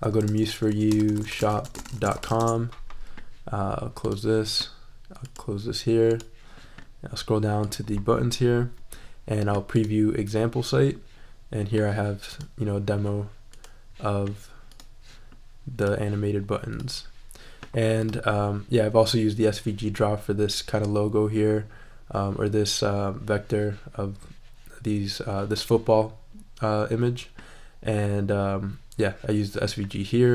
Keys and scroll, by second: 0.0-2.8 typing.